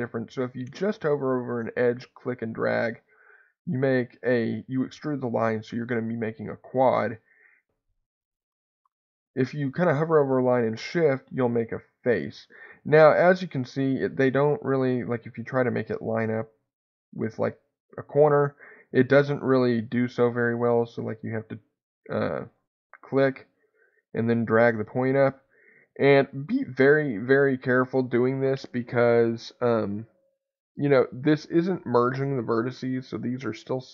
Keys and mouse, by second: 1.8-6.6 drag, 22.4 ctrl+click, 23.9-27.6 drag.